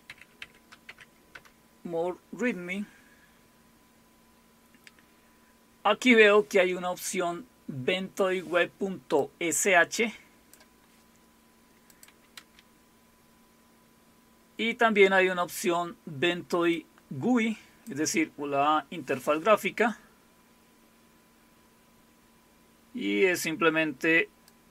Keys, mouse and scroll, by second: 0.0-1.3 typing, 3.0 typing, 9.2-10.6 drag, 11.9 click, 12.4 space, 16.7-18.7 drag, 24.5-24.7 drag.